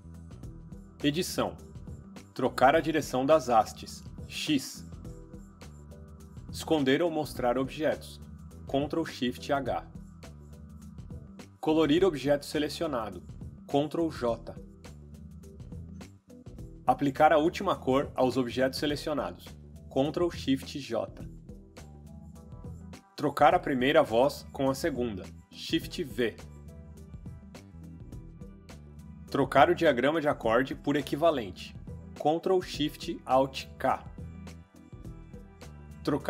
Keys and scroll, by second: 4.5 x, 8.5 ctrl+shift+h, 10.0 ctrl+shift+h, 13.1 ctrl+j, 21.1 ctrl+shift+j, 24.7 shift+v, 26.8 shift+v, 33.9 ctrl+alt+shift+k.